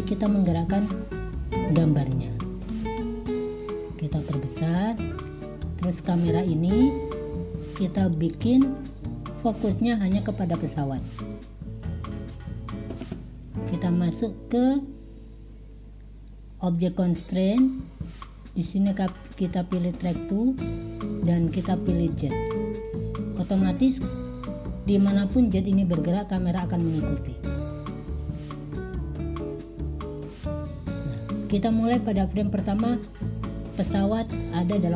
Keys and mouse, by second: 0.5 click, 3.2 s, 8.0 click, 12.4 click, 17.0-20.3 drag, 21.2-22.6 drag, 27.3 click, 27.3 middle click, 27.5 click, 27.8 middle click, 28.5 click, 28.7 middle click, 28.7 click, 29.1-30.2 middle drag, 30.2-31.3 drag.